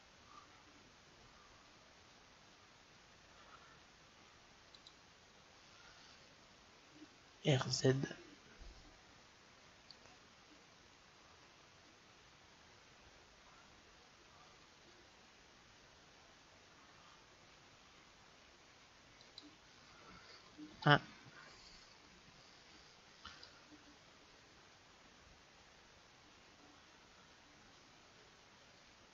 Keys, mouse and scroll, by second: 5.3-7.7 drag, 7.7 r, 20.5 KP_1, 23.7-25.4 drag.